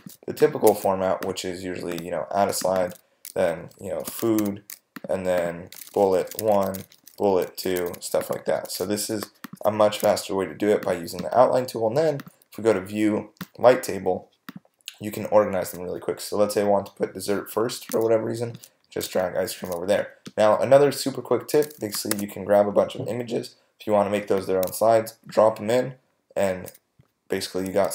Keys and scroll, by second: 3.8-8.1 typing, 8.4 super+space, 22.1 super+a.